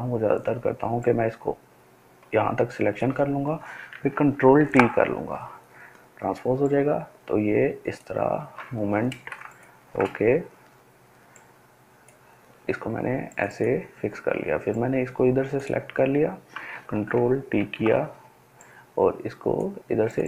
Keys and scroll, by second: 4.6 ctrl+t, 17.5 ctrl+t.